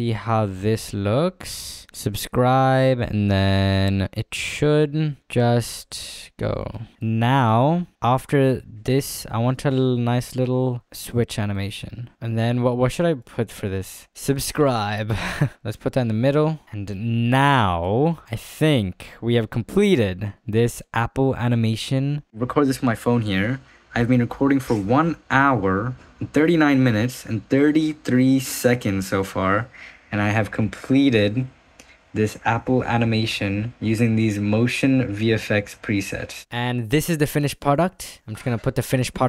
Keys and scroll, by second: 7.7 ctrl+s, 12.1 space, 20.2 ctrl+s.